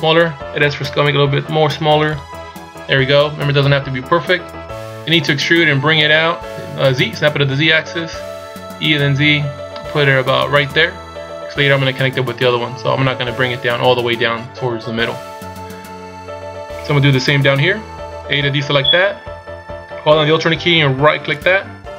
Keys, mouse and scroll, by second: 0.6 s, 5.2 e, 12.4-15.5 scroll up 1, 18.3 a, 21.3 alt+right click.